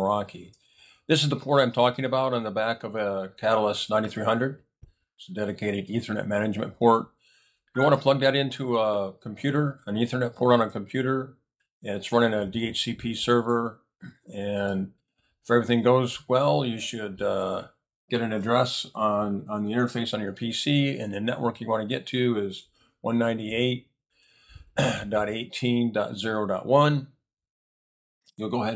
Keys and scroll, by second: 22.3-23.4 typing, 24.0 Return.